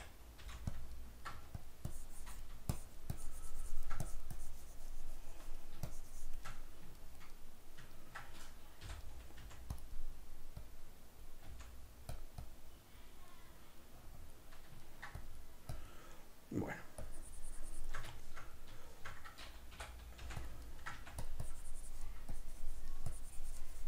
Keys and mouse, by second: 1.1 ctrl+middle click, 1.4 f, 2.0-6.6 drag, 6.6-9.8 middle drag, 8.9 g, 9.4 f, 9.8 click, 10.0 middle click, 10.7-12.2 drag, 11.5 f, 12.5 click, 13.4 middle click, 14.2 click, 14.9 ctrl+middle click, 15.3-18.2 drag, 18.2-20.6 shift+middle drag, 19.8 i, 20.6 click, 20.7 ctrl+middle click, 21.1 f, 21.5-23.8 drag.